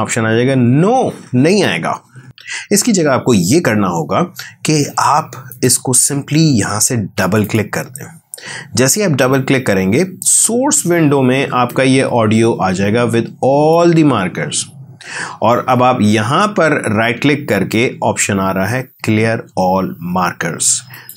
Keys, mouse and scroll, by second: 2.2 right click, 5.5 click.